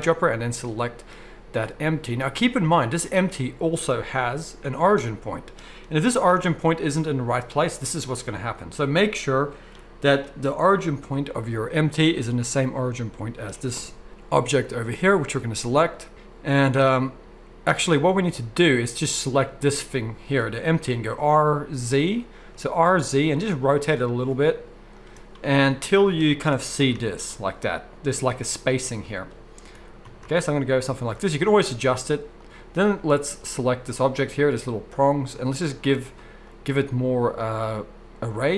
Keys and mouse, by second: 2.7 click, 4.2 g, 5.9 g, 9.7-15.2 middle drag, 15.2 click, 15.3-19.1 middle drag, 19.1 click, 19.2-35.4 middle drag, 21.1 r, 26.5 r, 35.4-38.5 drag.